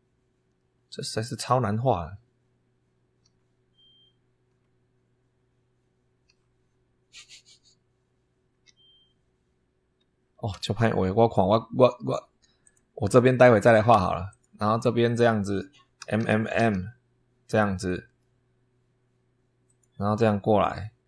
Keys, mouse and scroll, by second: 3.1 m, 4.4 m, 6.1 m, 8.4 m, 10.4 Escape, 12.5 click, 14.2 click, 15.9 m, 19.5 click.